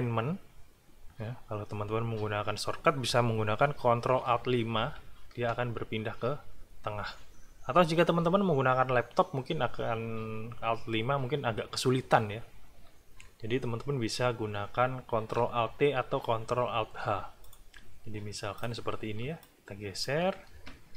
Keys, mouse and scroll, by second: 4.8 ctrl+alt+KP_5, 17.4 click, 18.5 click, 19.4 alt+click.